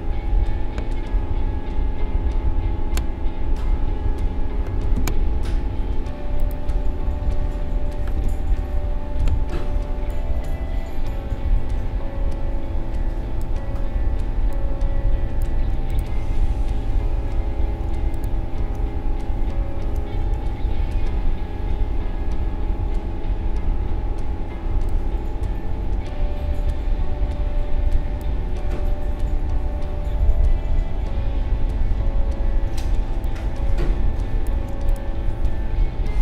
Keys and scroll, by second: 4.9 v, 8.2 v.